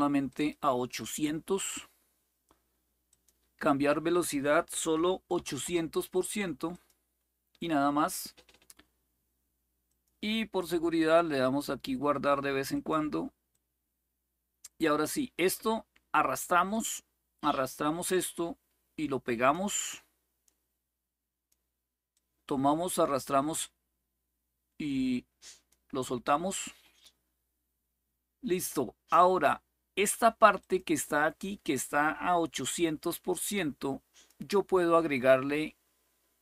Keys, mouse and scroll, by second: 0.0-2.8 right drag, 2.8 click, 4.9-5.8 typing, 6.5 click, 9.6 click, 10.7 click, 12.5 click, 13.3-16.7 drag, 17.9-19.3 drag, 19.7-21.3 drag, 21.9-25.5 drag, 28.2-29.2 drag, 30.3 click, 32.4-34.1 drag.